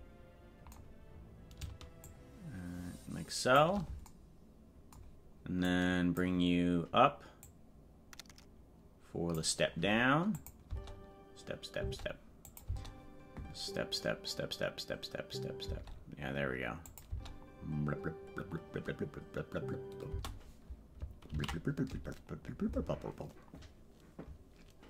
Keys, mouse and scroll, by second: 2.0-3.6 shift+drag, 5.7 click, 7.4-9.4 drag, 10.4 click, 10.6 space, 12.5 click, 12.6 space, 16.9 click, 17.1 space, 24.2 ctrl+s.